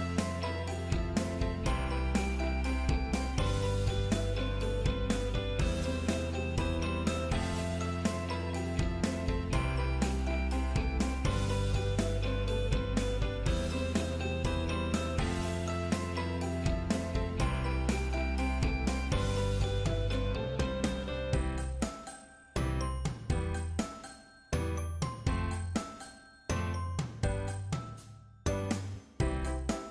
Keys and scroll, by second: 4.2 ctrl+8, 17.5 ctrl+8.